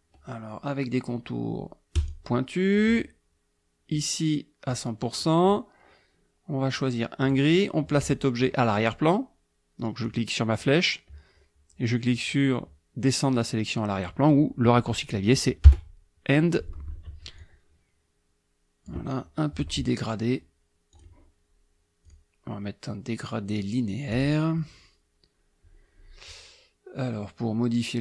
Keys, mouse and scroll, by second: 2.0 click, 3.9 right click, 4.7 click, 7.3 click, 10.1 click, 15.7 End, 17.4-19.1 drag, 21.0 click, 22.1 click, 24.2 click.